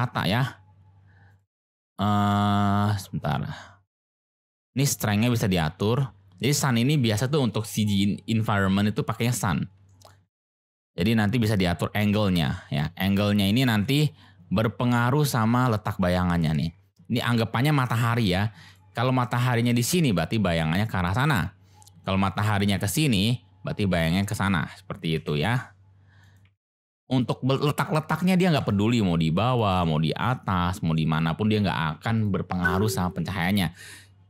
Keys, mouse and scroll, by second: 0.1 g, 0.3 x, 1.3 click, 1.8-2.2 drag, 4.7 click, 5.1-6.5 middle drag, 9.8 shift+click, 11.7-12.8 drag, 13.6 ctrl+z, 14.9-17.2 drag, 17.6 g, 17.7 x, 18.6 click, 22.0-24.3 drag, 25.1 g, 25.3 y, 26.2 click, 26.4 g, 26.5 x, 28.3 click, 28.5 g, 28.6 z, 29.5 click, 29.7 g, 29.9 y, 30.9 drag, 31.6 g, 31.7 z, 32.1 click.